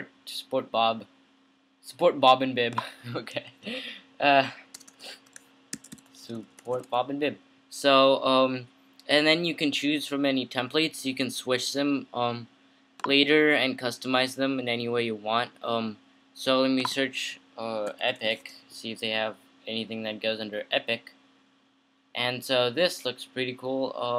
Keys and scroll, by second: 4.0 fn+Right, 4.5 Right, 4.9-7.4 typing, 17.8-18.9 typing.